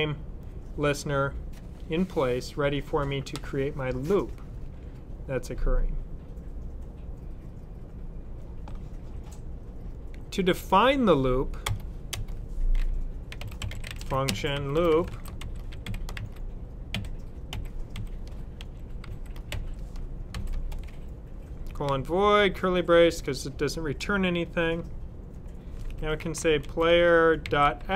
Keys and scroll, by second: 12.9-20.2 typing, 25.6-27.9 typing.